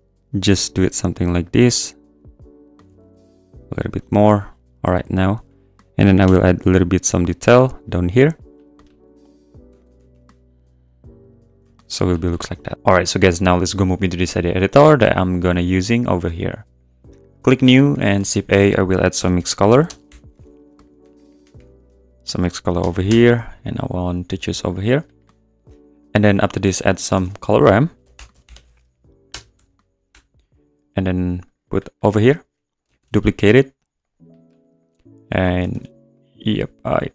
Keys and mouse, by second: 1.3 click, 2.8 g, 3.0 z, 4.0 click, 6.2 i, 8.2 click, 9.7 e, 9.8 click, 9.9 g, 10.1 z, 11.6 Tab, 11.9 click, 12.4 `, 15.5 click, 16.8 click, 17.9 click, 18.1 shift+a, 19.9-21.5 typing, 24.7 click, 26.0 click, 27.2 shift+a, 31.4 click, 32.3 click, 33.0 shift+d, 34.0 click, 35.7 shift+d, 36.1 click, 36.5 click.